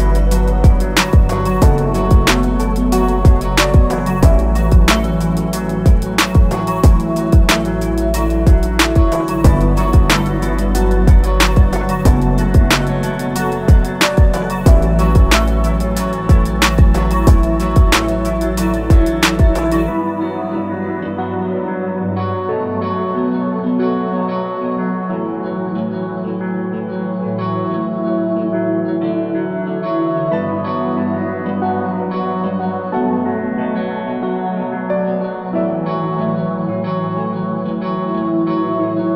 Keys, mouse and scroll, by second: 1.8 click, 4.2 click, 7.7 click, 10.3 a, 10.5 click, 17.0 click, 22.3 i, 24.0 click, 32.6 a, 32.9 click, 38.3 click.